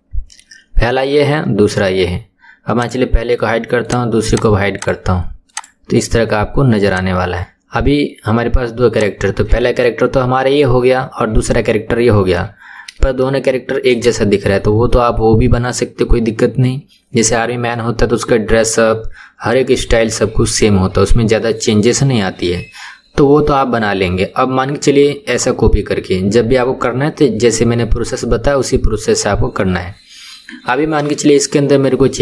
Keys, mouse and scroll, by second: 2.8 click, 3.9 click, 4.3 click, 4.8 click, 5.4 click, 6.9 click, 8.9 click, 13.2-32.2 shift+middle drag.